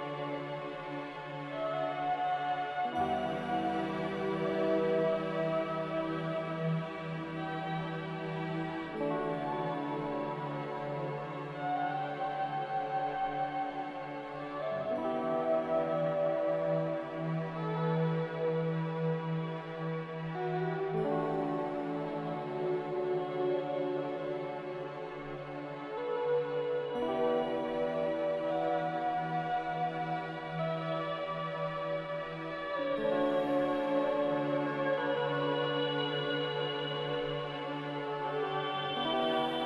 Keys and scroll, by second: 2.9 z, 5.9 x, 7.9 z, 11.4 z, 13.2-14.3 typing, 13.4 Return, 16.0 x, 18.2 z, 23.7 5, 25.3 5, 26.4 z, 29.5 z, 33.0 a, 34.5 z, 37.0 Escape, 38.8 r.